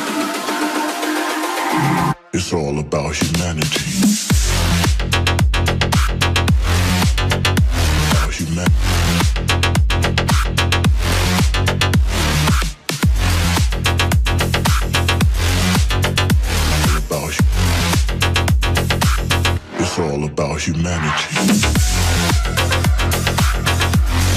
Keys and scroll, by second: 17.6 Delete.